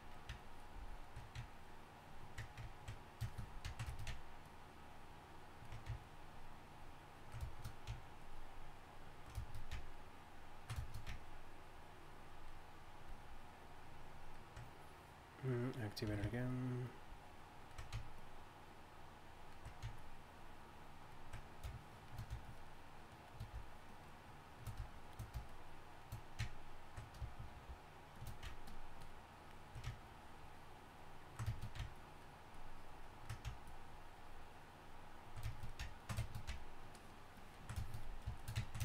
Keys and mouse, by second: 0.0-1.2 middle drag, 1.3-2.5 middle drag, 3.0-7.7 middle drag, 27.5 shift+f.